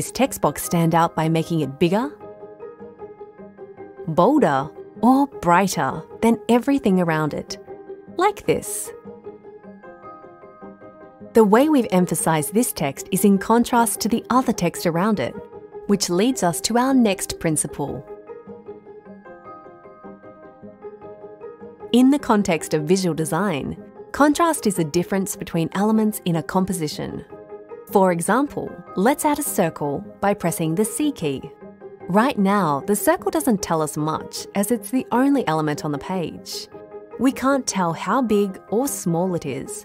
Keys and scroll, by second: 30.8 c.